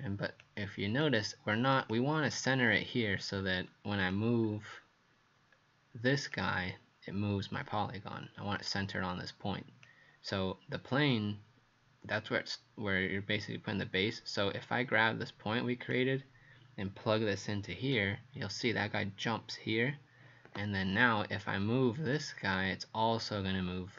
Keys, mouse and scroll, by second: 3.4-4.0 scroll down 1, 4.0 click, 4.4 scroll down 2, 5.6-6.3 scroll up 1, 6.3 click.